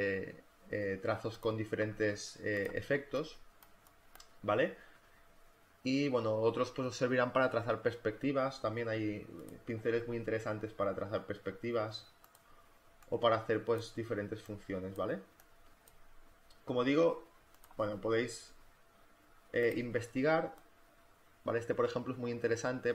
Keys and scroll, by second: 2.8 space, 12.6 space, 20.0 space.